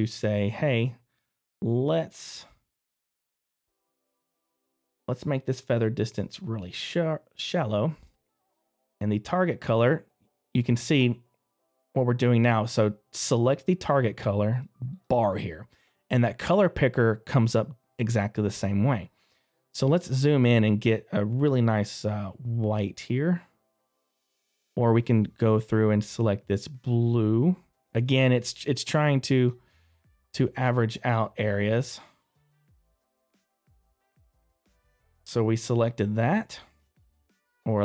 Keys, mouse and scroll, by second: 19.5 scroll up 2, 21.8 scroll down 1, 22.4 scroll up 1, 23.8 scroll down 1, 24.2 middle click, 25.2 middle click, 25.2 scroll down 1, 29.0 click, 30.9 click, 34.2 space, 35.4 scroll down 1, 36.0 scroll up 1, 36.5 middle click.